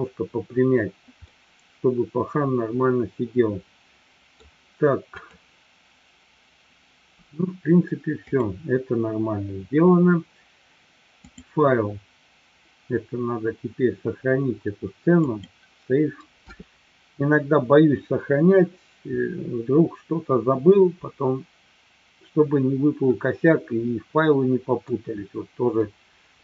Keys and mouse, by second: 1.2-4.4 middle drag, 5.9 click, 8.9 click, 11.4-18.6 drag, 23.2-24.9 middle drag, 25.7-26.4 middle drag.